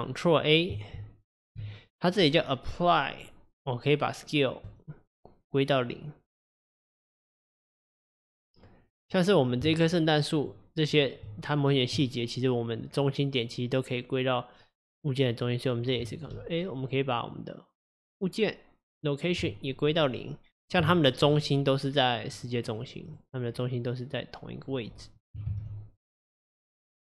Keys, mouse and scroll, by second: 1.0 ctrl+a, 9.1 click, 9.8 shift+click, 10.4 shift+click, 10.9 shift+click, 16.4 ctrl+a, 20.9-21.3 shift+middle drag, 21.3 click, 22.4 drag, 22.7 drag, 23.1 click, 24.8 click, 25.6 ctrl+z, 26.6 click.